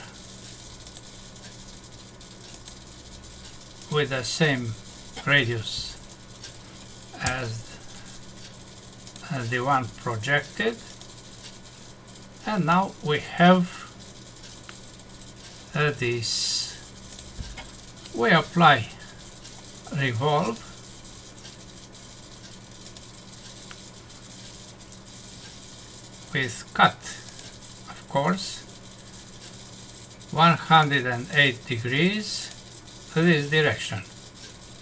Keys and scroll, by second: 7.2 Escape, 12.6 Num_Lock.